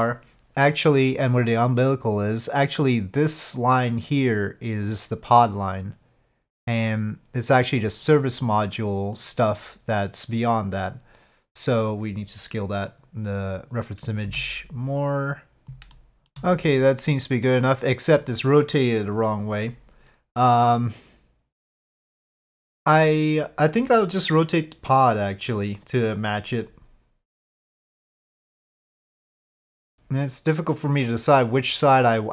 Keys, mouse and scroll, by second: 9.1 click, 14.2 s, 14.7 click, 14.9 middle click, 15.9-16.3 shift+middle drag.